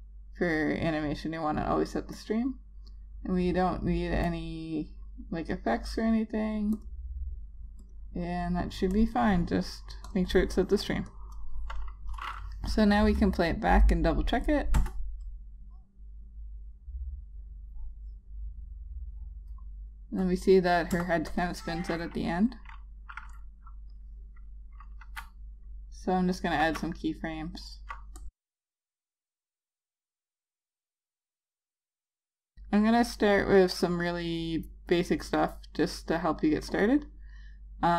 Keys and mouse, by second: 2.3 click, 15.0 Return, 21.1 Return, 21.5 click, 25.4 F5, 27.0 F5, 27.2 click, 27.5 double click, 27.7 click, 27.8 F5, 28.5 click, 28.8 double click, 29.1 click, 29.8 double click, 30.2 click, 30.3 F5, 30.8 click, 31.2 double click, 31.5 click, 31.5 F5, 31.8 click.